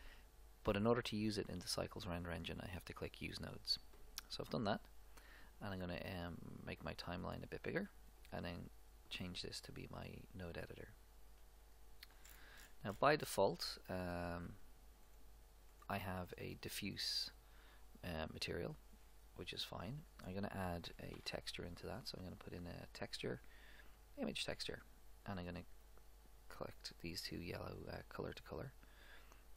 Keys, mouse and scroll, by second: 3.3-5.0 drag, 7.5-9.1 drag, 9.6-12.3 drag, 12.3-12.7 scroll down 1, 12.7-14.1 middle drag, 14.5-16.3 drag, 15.1-18.2 right drag, 19.0-20.9 drag, 21.2 shift+a, 25.8-27.7 drag.